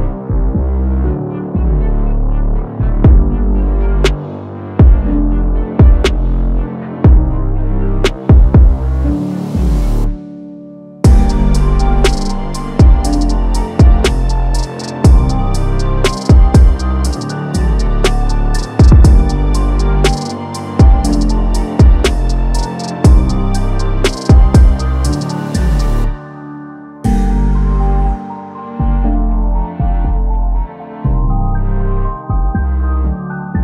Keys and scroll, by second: 28.1 ctrl+d.